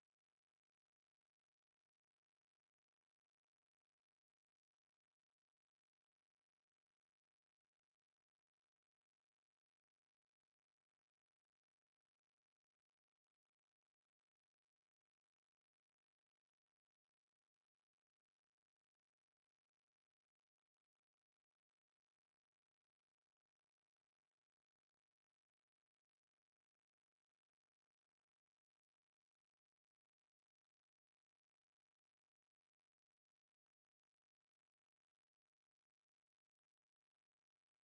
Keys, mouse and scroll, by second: 0.1 space, 5.8 g, 8.4-11.7 middle drag, 9.5 Tab, 14.8 x, 16.1 click, 16.4 Tab, 16.4-18.1 middle drag, 16.4 shift+s, 17.9 shift+a, 21.0 s, 24.3 Tab, 25.3 ctrl+r, 29.3 right click, 29.9-33.3 middle drag, 33.2 KP_1, 33.7 KP_5, 34.0 middle click, 34.8 KP_Decimal, 35.8-37.8 middle drag, 37.2 e.